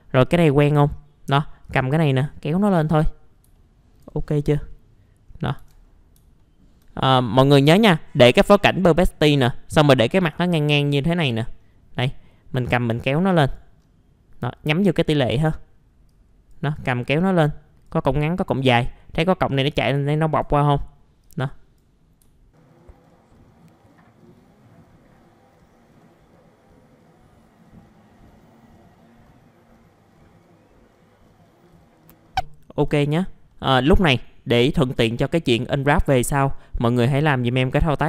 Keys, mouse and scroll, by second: 2.6-2.9 scroll down 1, 2.9 middle click, 3.5 alt+middle click, 4.4-4.8 scroll down 1, 5.3 scroll up 1, 5.6 ctrl+z, 5.8-6.2 scroll up 1, 6.4 alt+middle click, 6.9 scroll up 1, 8.8-10.3 alt+middle drag, 10.4-11.0 scroll up 1, 11.0-11.4 scroll down 1, 11.4 middle click, 12.7 click, 13.8-14.8 scroll down 1, 14.8-15.4 scroll up 1, 15.4 middle click, 16.1 click, 20.0 alt+middle click, 21.2 click, 22.8 click, 23.0 alt+middle click, 23.2 click, 23.3 alt+middle click, 23.4 scroll down 1, 23.5 scroll up 1, 23.6 ctrl+z, 23.7 click, 24.1 click, 24.2 alt+middle click, 24.6 click, 24.8 alt+middle click, 25.0 click, 25.4 click, 25.7 click, 26.2 click, 26.6 click, 26.7 alt+middle click, 26.8 click, 27.0 alt+middle click, 27.3 click, 27.4 alt+middle click, 27.7 alt+middle click, 27.8 scroll up 1, 27.9 scroll down 1, 28.1 click, 28.3 alt+middle click, 28.5 click, 28.7 scroll down 1, 28.9 scroll up 1, 29.0 click, 29.6 click, 29.7 alt+middle click, 30.0 click, 30.1 middle click, 30.5 scroll up 1, 30.7 click, 31.0 alt+middle click, 31.1 click, 31.2 scroll down 1, 31.3 alt+scroll up 2, 31.7 ctrl+z, 31.8 alt+middle click, 32.1 alt+middle click, 32.4 alt+middle click, 33.0 right click, 33.5 middle click, 34.6 alt+middle click, 35.1-36.9 scroll up 1, 36.9 right click.